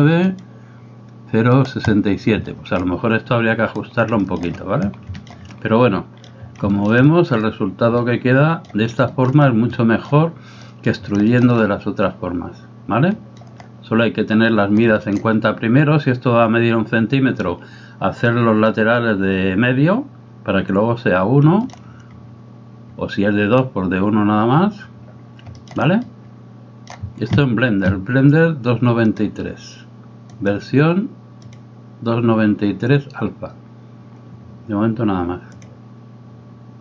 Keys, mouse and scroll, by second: 0.4 right click, 2.5-2.8 middle drag, 4.3 shift+middle click, 5.3 shift+middle click, 5.6 middle click, 6.8 shift+middle click, 7.1 middle click, 8.1 middle click, 9.2 shift+middle click, 9.7 middle click, 10.7 middle click, 11.6-13.5 middle drag, 15.1 shift+middle click, 21.6 shift+middle click, 25.6 shift+middle click, 26.1 middle click, 29.3-36.8 drag.